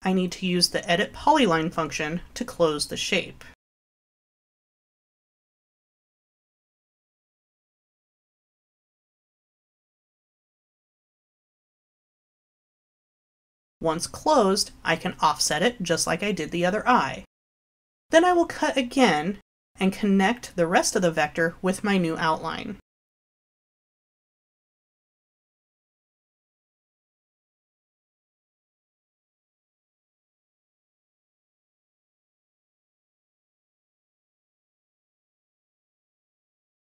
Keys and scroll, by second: 22.7 i, 28.5 l, 33.2 Delete, 35.9 l.